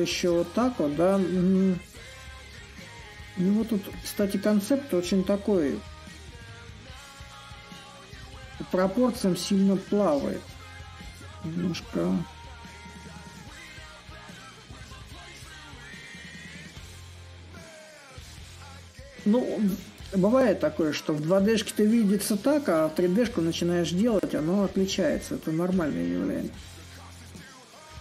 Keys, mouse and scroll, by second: 2.6 a, 3.6-5.2 middle drag, 5.2 s, 7.5 middle click, 7.8-12.6 drag, 13.2-18.3 drag, 18.4-22.0 drag, 22.0 s, 23.0-28.0 drag.